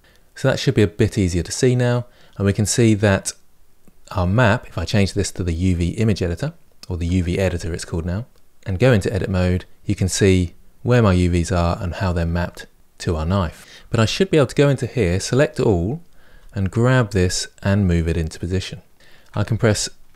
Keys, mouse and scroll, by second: 0.0-7.4 middle drag, 0.0 scroll up 2, 0.2-0.8 scroll down 1, 0.8-2.2 scroll down 1, 2.2-7.4 scroll down 1, 8.7 Tab, 14.9 a, 16.1 g.